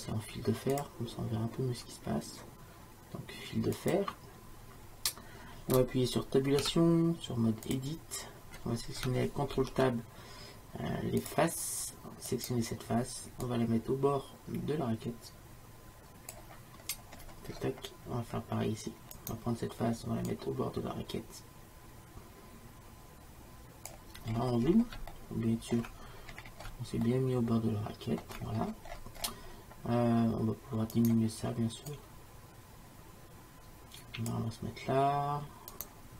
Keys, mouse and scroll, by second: 0.8-2.7 drag, 6.7 Tab, 9.6 ctrl+Tab, 12.4-13.5 right drag, 13.9-15.5 drag, 16.9-19.2 middle drag, 19.2-20.3 drag, 24.4 middle click, 25.2-27.6 middle drag, 28.8-31.0 middle drag, 31.0-33.9 drag, 32.0 right click, 35.8-36.1 drag.